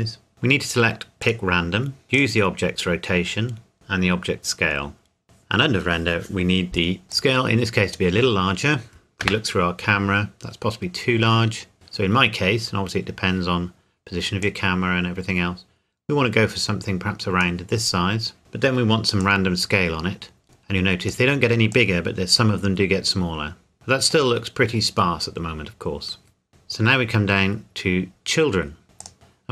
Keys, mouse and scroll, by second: 0.3-0.9 scroll down 1, 1.2 click, 2.1 click, 7.1 click, 8.2-8.7 scroll down 1, 8.7-9.2 scroll up 1, 9.2 KP_0, 10.3-11.7 scroll up 1, 12.2 scroll up 1, 12.3 scroll down 1, 12.5-13.0 scroll up 1, 14.4 click, 19.2 click, 24.3 middle click, 24.8 scroll down 1, 25.5-26.5 scroll up 1, 26.5-27.5 scroll down 1, 29.0 click, 29.1-29.5 scroll down 1.